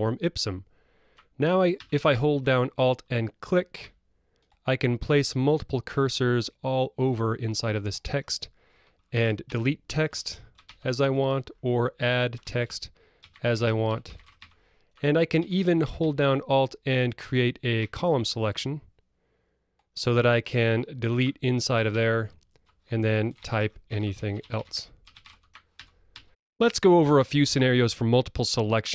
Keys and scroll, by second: 5.7 Escape, 9.5 alt+Delete, 10.6 alt+BackSpace, 15.4 Escape, 21.9 alt+BackSpace, 25.7 alt+BackSpace.